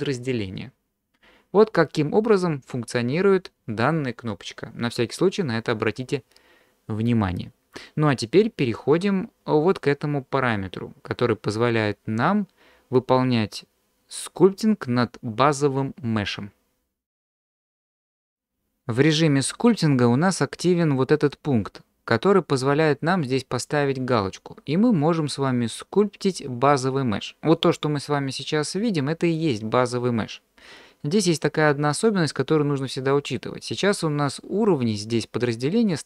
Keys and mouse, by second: 28.4 middle click.